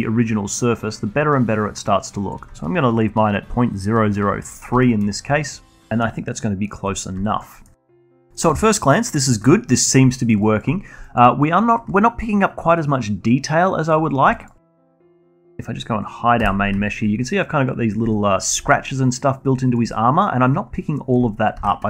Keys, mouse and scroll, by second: 2.5 middle drag, 2.7-3.2 alt+middle drag, 3.2-4.5 alt+drag, 4.5 alt+middle drag, 4.8-6.2 alt+drag, 6.2 alt+middle click, 6.6-8.0 scroll down 1, 9.1 middle click, 9.8 middle click, 10.1 alt+middle drag, 10.4 alt+click, 10.7 scroll up 1, 11.0-14.0 alt+drag, 14.0 scroll up 1, 14.3 alt+click, 14.7-15.2 alt+middle drag, 15.2 Tab, 16.3 h, 16.8-21.6 alt+drag, 21.6 ctrl+z.